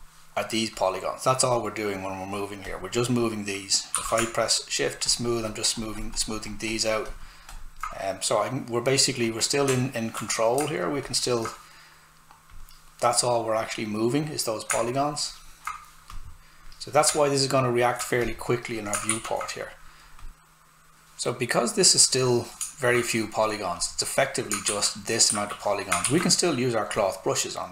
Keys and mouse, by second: 3.9 s, 4.0 click, 9.5 alt+click, 9.7 alt+right click, 10.8 shift+click, 19.1 shift+f, 19.7 click, 20.3 right click, 22.6 right click, 23.8 click, 24.7 shift+f.